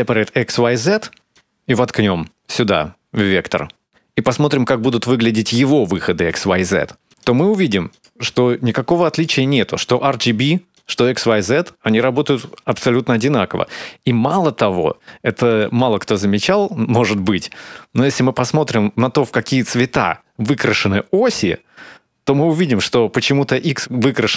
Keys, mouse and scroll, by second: 2.3 click, 7.4 ctrl+shift+click, 16.5 click, 20.0 middle click.